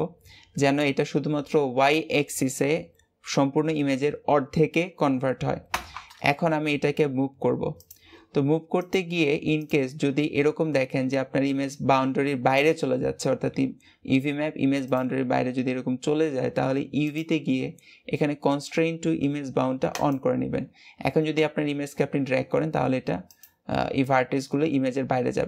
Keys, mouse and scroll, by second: 8.7-10.3 drag, 10.3 g, 16.9-20.0 drag.